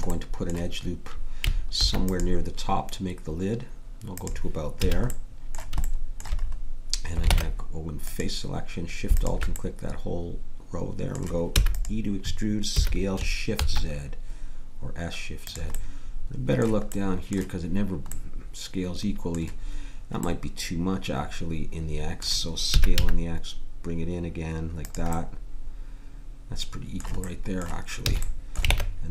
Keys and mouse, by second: 1.7 ctrl+r, 4.8 a, 7.3 ctrl+Tab, 9.4 click, 11.5 e, 12.7 s, 22.7 s, 28.1 a, 28.7 ctrl+Tab.